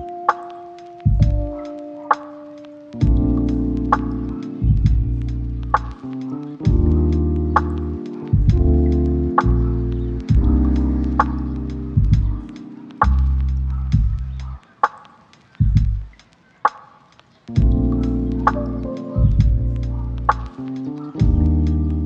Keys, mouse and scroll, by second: 1.3 shift+middle click, 1.8 ctrl+middle click, 5.1 right click, 7.3 middle click, 12.5 shift+middle click, 14.6 middle click, 15.1 1, 15.7 shift+a, 17.5 g, 17.9 ctrl+click, 18.9 s, 19.1 z, 20.7 s, 20.9 x, 21.8 g.